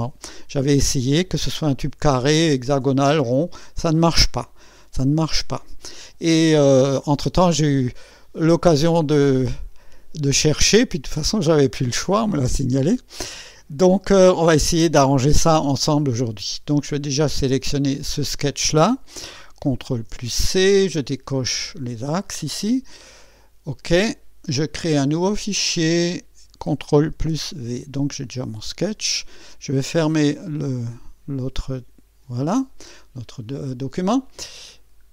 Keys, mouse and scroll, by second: 4.8 scroll up 1, 5.4 scroll down 1, 17.7 click, 19.9 ctrl+c, 21.8 click, 23.7 click, 25.6 click, 27.3 ctrl+v, 29.8 click, 31.6 click, 33.6-33.9 scroll down 1, 34.7 scroll down 1.